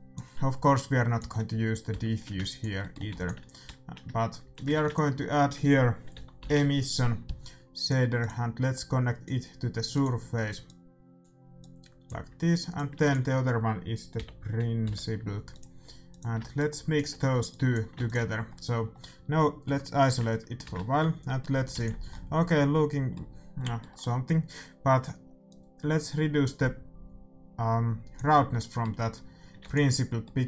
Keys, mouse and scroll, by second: 1.9 x, 3.1 ctrl+s, 3.6 a, 4.4 a, 9.2-14.3 drag, 12.9 shift+a, 16.5 right click, 17.9 ctrl+s, 18.4 click, 19.3-20.7 middle drag, 19.6 KP_Divide, 20.7 shift+z, 21.7 ctrl+s, 25.4-27.4 drag, 29.6 ctrl+s.